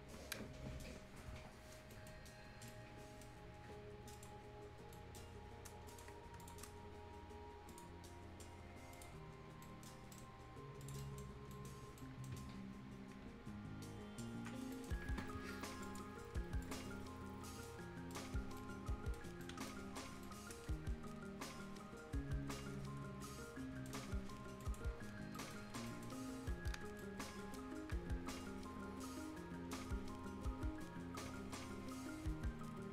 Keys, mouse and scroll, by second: 1.0 scroll down 1, 1.9 right click, 2.1 scroll down 1, 2.7-4.1 right drag, 4.1 click, 4.4 scroll down 1, 4.6 scroll up 1, 4.9 right click, 5.2 scroll down 1, 5.4 scroll up 1, 5.9 click, 6.1 scroll up 1, 6.4 shift+click, 7.7 click, 9.3 scroll up 1, 9.6 right click, 10.0 scroll down 1, 10.1 right click, 10.5 scroll up 1, 10.8 click, 11.0 right click, 11.3 scroll down 1, 11.5 right click, 14.6 ctrl+scroll up 1, 14.7 ctrl+right click, 15.8 ctrl+click, 17.0 ctrl+scroll up 1, 17.6 right click, 17.8 ctrl+right click, 18.2 ctrl+scroll up 1, 18.6 ctrl+right click, 20.0 ctrl+scroll down 1, 20.2-24.6 ctrl+right drag, 24.6 ctrl+click, 24.9 ctrl+scroll down 1, 25.3-25.8 ctrl+scroll up 2, 25.3 ctrl+right click, 25.9 ctrl+right click, 26.3-26.8 ctrl+scroll up 1, 27.0 ctrl+right click, 27.6 ctrl+scroll down 1, 28.4 scroll down 1, 31.2 ctrl+scroll up 1.